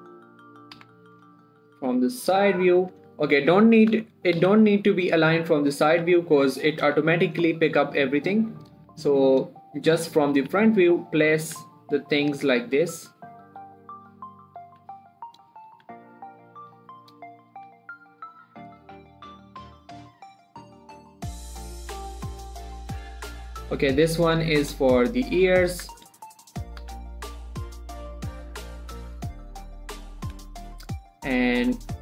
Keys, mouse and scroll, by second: 0.0 click, 1.7 shift+scroll up 2, 1.9 shift+middle click, 2.3 scroll down 1, 2.7 middle click, 3.4 1, 5.5-6.1 scroll up 1, 6.1 click, 6.3 g, 6.6 click, 7.3 g, 7.7 click, 7.9 scroll down 1, 8.2 shift+middle click, 8.6 click, 9.2 g, 9.7 click, 10.1-10.6 scroll up 1, 10.6 click, 10.8 g, 11.3 click, 11.8 g, 12.1 click, 12.7 g, 13.4 click, 13.9 g, 14.4 click, 15.1 g, 15.4 click, 16.1 g, 16.4 click, 17.2 g, 17.5 click, 18.0 g, 18.6 click, 19.3 g, 19.7 click, 20.5 g, 21.0 click, 21.7 g, 22.1 click, 22.4-23.2 scroll down 1, 23.2 click, 23.7 shift+click, 24.1 shift+middle click, 24.4 g, 25.1 click, 25.3 scroll down 1, 25.4 middle click, 26.2 1, 28.5 click, 28.8 g, 29.1 click, 29.7 g, 30.4 click, 30.7 scroll down 1, 30.9 shift+middle click, 31.1 shift+middle click, 31.3-31.8 scroll up 1, 31.8 click.